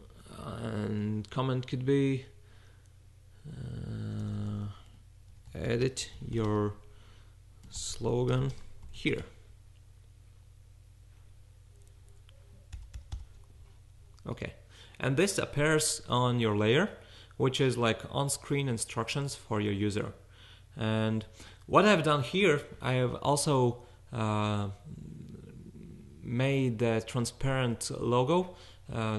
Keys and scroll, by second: 0.0-0.4 typing, 4.1-9.7 typing, 12.7 shift+., 13.0 shift+., 13.1 shift+..